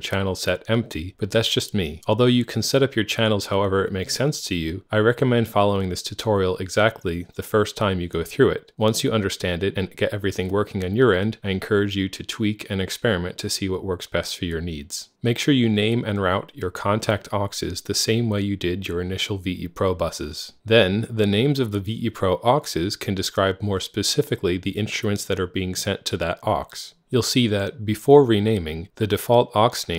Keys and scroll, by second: 14.9 Right, 15.1 Right, 15.2 Right, 15.4 Right, 15.9 Right, 16.3 Right, 17.3 Right, 18.2 Tab, 18.4 Tab, 18.5 Tab, 18.7 Tab, 23.8 F3, 27.9-28.6 typing.